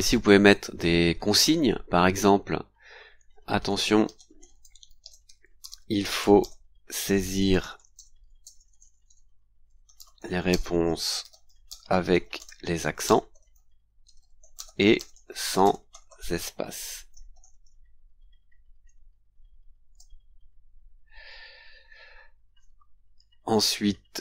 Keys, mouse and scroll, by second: 0.0 click, 3.1-18.1 typing, 19.9 shift+;, 22.3-22.7 scroll down 2, 23.7-24.1 scroll down 2, 24.1-24.2 scroll up 2.